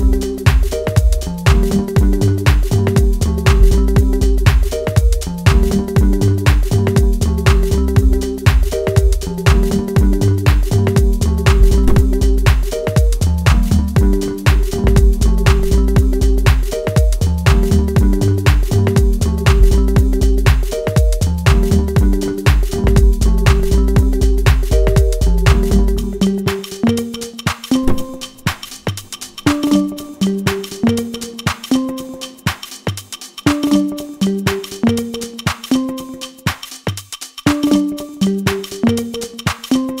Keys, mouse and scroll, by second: 0.7-12.7 drag, 12.7-14.7 middle drag, 14.7 click, 16.7-18.0 middle drag, 18.0-21.4 drag, 21.4-24.6 middle drag, 24.6 click, 27.4 middle click, 28.5 click, 29.5-32.1 middle drag, 32.1-39.2 drag, 39.5-40.0 middle drag.